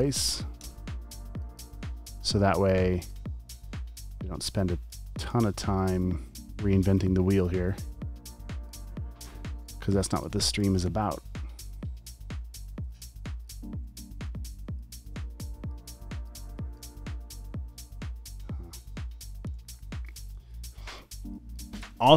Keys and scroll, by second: 0.6 BackSpace, 1.0 space, 1.6 alt+super+space, 2.1 v, 2.2 space, 4.7 space, 5.4 v, 9.3-11.4 typing, 12.8 space, 13.3 alt+super+space, 13.9-15.4 typing, 16.0 super+space, 16.5 space, 17.0 v, 18.7-22.1 typing.